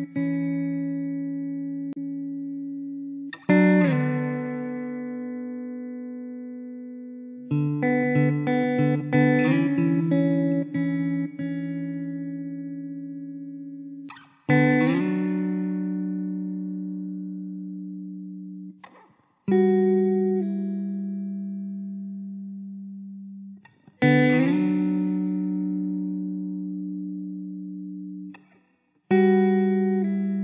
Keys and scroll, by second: 4.1 shift+d, 7.3 KP_0, 15.5 s, 21.8 ctrl+l, 23.0 ctrl+j, 24.2 ctrl+v, 29.3 ctrl+j.